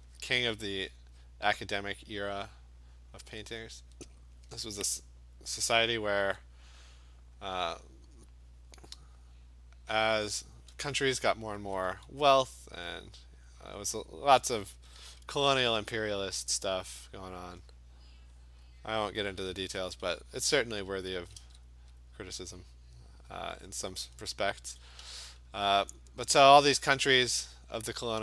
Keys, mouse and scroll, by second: 0.2 click, 0.6 click, 1.3 click, 1.6 click, 2.1 click, 2.4 click, 3.0 click, 3.4 click, 3.8 click, 4.0 click, 5.9 click, 6.2 [, 7.4 click, 7.7 click, 8.9 click, 9.2 click, 9.4 click, 10.0 click, 10.3 click, 10.5 click, 11.6 [, 11.9 [, 12.4 click, 12.8 click, 13.4 alt+click, 14.6 alt+click, 14.6 ], 14.9 ], 15.1 ], 15.3 ], 16.3 click, 17.5 click, 19.1 click, 20.0 alt+click, 20.9 [, 21.1 [, 21.5 [, 21.8 click, 22.4 click, 22.5-24.3 alt+click, 23.0 click, 23.8 click, 24.1 alt+click, 24.2 click, 24.6 click, 25.0 alt+click, 25.0 ], 25.3 ], 25.8 click, 26.1 click, 26.4 click, 26.7 click, 26.9 click, 27.2 click, 27.4 click, 27.7 click.